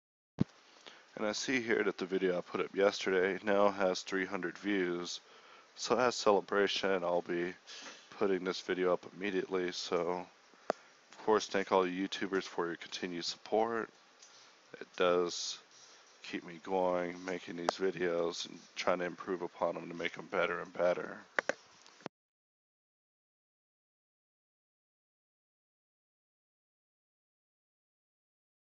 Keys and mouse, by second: 0.0-2.7 typing, 5.3 KP_1, 5.6 KP_3, 5.6 z, 6.0 a, 7.3 ctrl+click, 8.0-14.5 typing, 9.4 Tab, 10.2 Tab, 16.8 click, 16.9 g, 17.6 KP_1, 18.0 a, 18.3 k, 19.4 click, 19.4 g, 20.0 g, 20.8 Tab, 21.2 Tab, 21.6 g, 22.2 g, 22.6 g, 23.0 Tab, 23.5 KP_1, 23.8 ctrl+1, 24.2 ctrl+1, 24.9 ctrl+z, 25.1 KP_1, 25.2 Tab, 25.5 z, 28.4-28.7 typing.